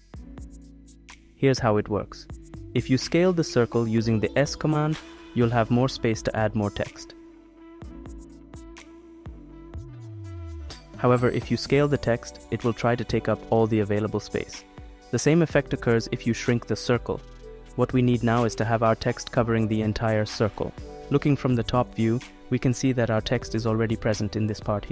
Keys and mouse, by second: 0.5-3.2 middle drag, 4.8 middle click, 6.3 s, 12.7 click, 13.7 s, 19.7 ctrl+z, 21.2 click, 21.4-22.4 middle drag, 22.9 middle click.